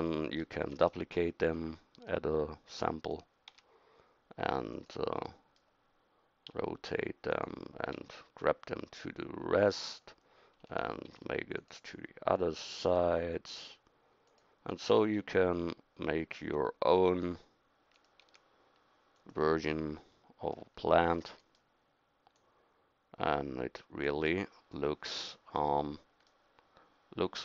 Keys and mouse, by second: 0.6 shift+d, 3.5 s, 6.5 r, 8.0 g, 11.1 shift+d, 12.6 r, 15.2 g, 18.2 s, 22.4-24.1 middle drag.